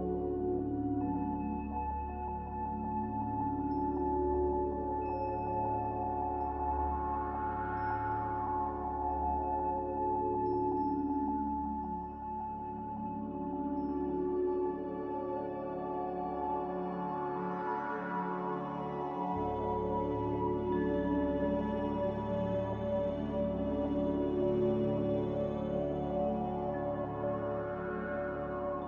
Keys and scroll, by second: 2.5 9, 3.0 Return, 3.0 5, 17.4 z, 18.8 3, 18.9 Return.